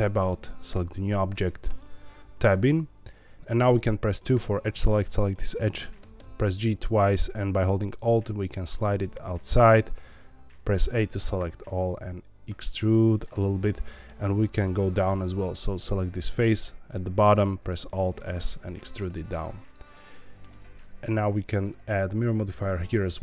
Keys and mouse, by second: 0.1 click, 1.6 Tab, 3.3 3, 3.3 2, 5.0 click, 6.0 g, 6.1 g, 9.4 alt+click, 9.6 a, 10.9 middle click, 11.3 e, 13.1 click, 13.3 middle click, 15.4 click, 16.2 3, 16.4 click, 16.9 middle click, 18.8 shift+click, 19.1-20.4 middle drag, 20.5 Tab, 21.5-22.6 drag.